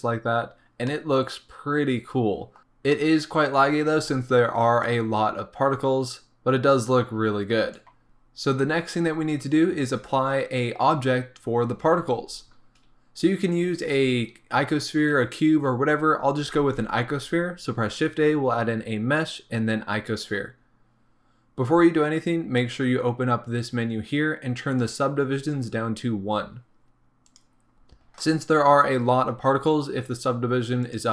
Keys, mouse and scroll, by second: 0.4-0.9 scroll up 2, 2.6 click, 2.9 scroll down 2, 2.9-5.0 middle drag, 3.7 scroll down 2, 3.9-5.0 scroll up 2, 5.0-8.0 drag, 8.0-9.4 shift+middle drag, 20.2 shift+a, 22.0 middle click, 25.0-31.1 drag.